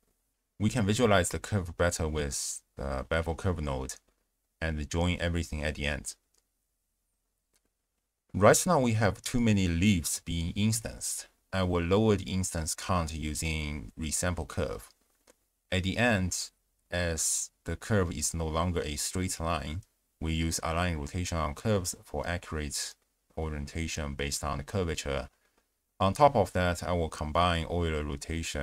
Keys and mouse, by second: 0.6 middle click, 1.3 ctrl+a, 2.5 click, 3.0 middle click, 3.3 ctrl+a, 4.7 click, 4.9 g, 5.2 click, 5.7 click, 6.1 x, 8.3 space, 8.5 click, 9.1 click, 10.1 click, 11.2 ctrl+a, 12.9 click, 13.7 click, 16.2 shift+space, 17.5 click, 18.4 click, 21.2 click, 21.7 g, 22.0 click, 22.4 ctrl+a, 23.3 drag, 26.1 shift+space, 26.5 click, 27.1 click, 27.7 click, 28.1 ctrl+a.